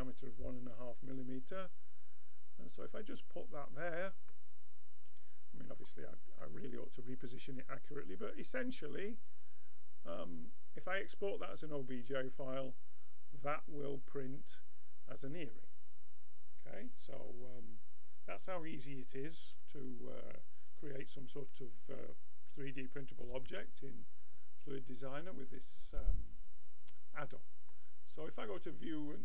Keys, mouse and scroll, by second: 4.3-6.1 middle drag, 6.4-8.1 middle drag, 17.3-19.2 drag, 23.5 x, 25.9-27.8 drag, 28.9-29.2 middle drag.